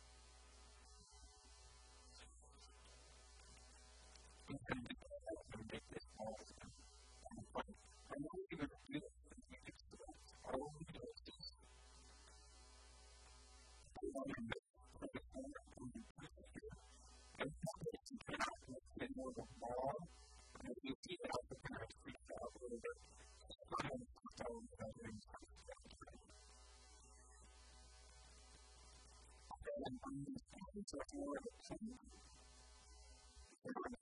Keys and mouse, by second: 1.1 s, 2.1 a, 2.3 b, 8.6 b, 10.7-12.5 middle drag, 11.1 b, 14.1-15.9 drag, 19.0-21.9 middle drag, 20.7 KP_1, 21.0 KP_3, 21.5 s, 23.1-26.7 typing, 26.2 right click, 29.5-30.7 drag, 29.5 s, 31.8-34.0 drag, 32.8 s.